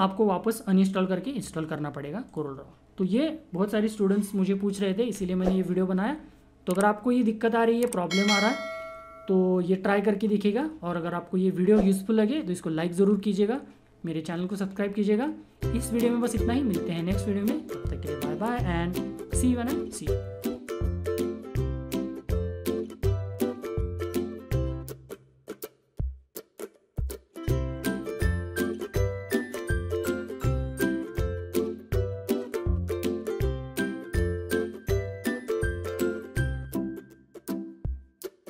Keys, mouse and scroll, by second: 2.3 click, 20.5 F10.